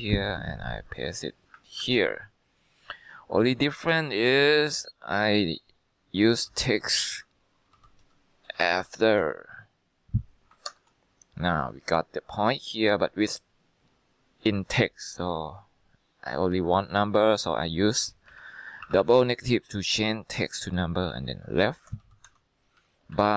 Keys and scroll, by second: 0.0 Escape, 1.9 ctrl+v, 6.4-9.2 typing, 9.3 Tab, 10.8 ctrl+Return, 14.4-15.1 typing, 18.4 Left, 18.9 -, 19.1 -, 20.9-22.6 typing, 22.9 Down, 23.2 Left.